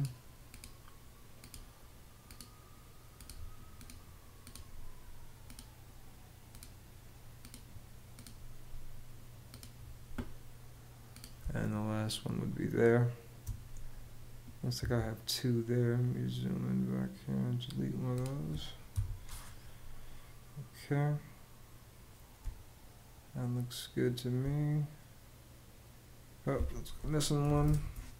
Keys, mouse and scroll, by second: 11.0 space, 14.4 Escape, 18.6 BackSpace, 22.0 space, 26.8-27.8 typing.